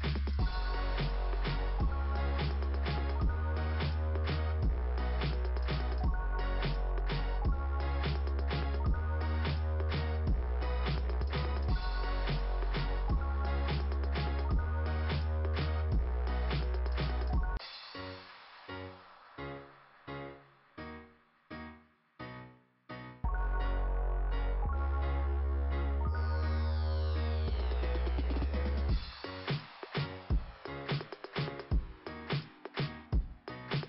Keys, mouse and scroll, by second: 2.8 scroll down 2, 5.8 scroll up 2, 10.1 scroll up 2, 14.3 click, 17.2 click, 17.4 click, 20.9 click, 24.5 Delete, 27.6 click, 27.8 click, 28.2 click, 28.5 click, 28.8 click, 29.1 click, 30.6 click, 31.8 right click.